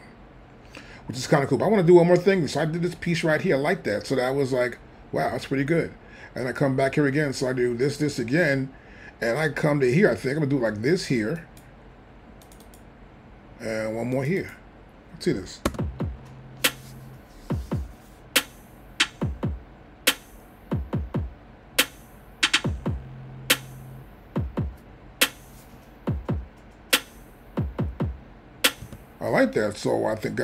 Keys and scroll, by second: 15.7 space, 28.8 space.